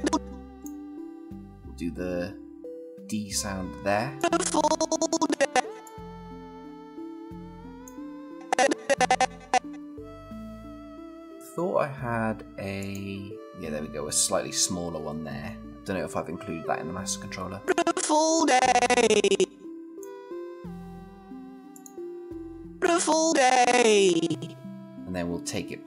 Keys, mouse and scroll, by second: 4.0-5.8 click, 17.8-20.0 click, 22.9-24.7 click.